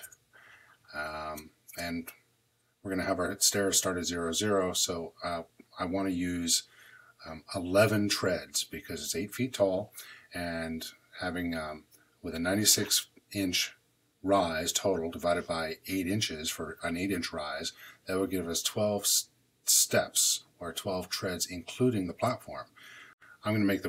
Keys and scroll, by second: 23.1 shift+super+m.